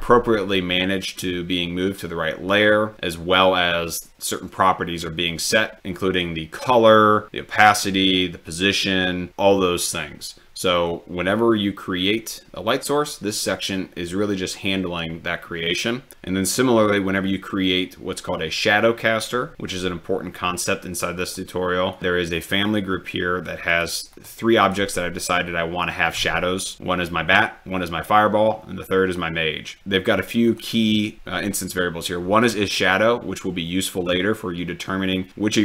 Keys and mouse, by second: 21.2 click, 24.6 click.